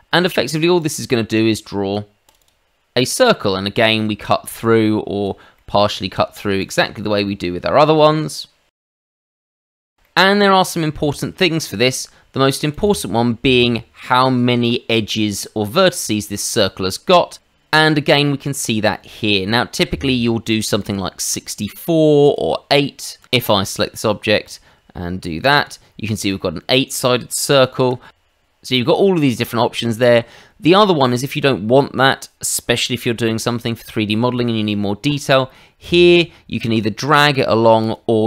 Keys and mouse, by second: 0.8 click, 2.2 click, 2.4 click, 3.3 middle click, 4.6 click, 5.5 middle click, 6.6 click, 7.7 middle click, 8.8 click, 9.1 middle click, 9.3 click, 9.5 middle click, 9.8 ctrl+z, 10.0 middle click, 12.7 click, 20.8 click, 22.2 click, 23.2 click, 23.4 click, 24.4 click, 25.4 click, 25.5 click, 27.5 ctrl+z, 35.1 click, 35.8 click, 36.6 click, 37.8 click.